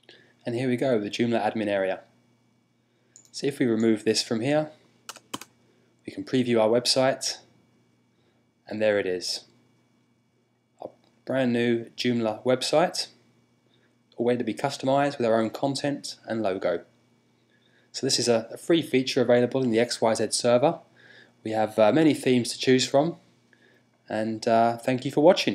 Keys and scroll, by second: 4.8 BackSpace, 5.0 Return.